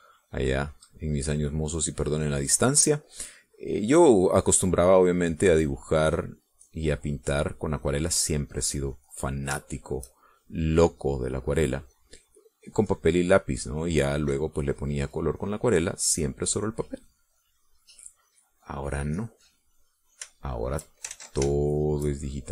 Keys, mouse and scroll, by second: 1.7-2.9 drag, 3.2-9.7 drag, 10.2 click, 10.8 shift+click, 11.4-17.9 shift+drag, 18.0-19.8 drag, 19.9-22.0 drag, 22.3 ctrl+shift+z.